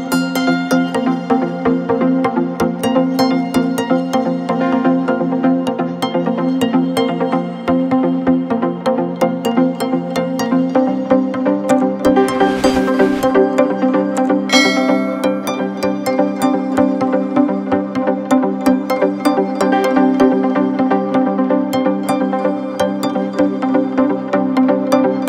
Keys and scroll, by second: 5.6 BackSpace, 6.7 a, 15.4 Return, 20.2 t, 20.8 BackSpace, 21.9 a, 22.1 r, 23.2 Return.